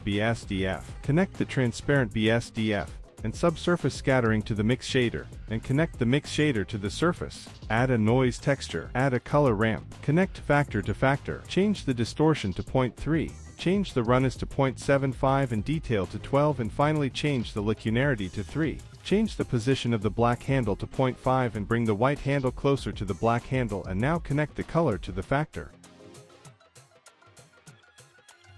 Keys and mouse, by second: 1.4-2.3 drag, 2.8-3.4 drag, 4.0 click, 5.1 middle click, 5.6 shift+a, 8.2 shift+a, 9.5 middle click, 10.3-11.1 drag, 11.5 middle drag, 12.7 click, 13.8-15.9 drag, 16.5 click, 17.5 click, 18.9 middle click, 21.1 click, 21.3 click, 22.8 click, 23.4-25.6 drag, 26.3-28.5 drag.